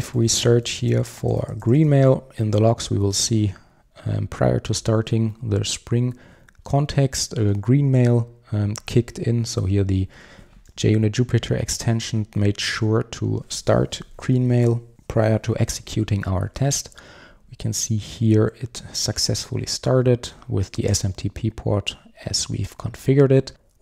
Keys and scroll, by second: 0.3 super+f.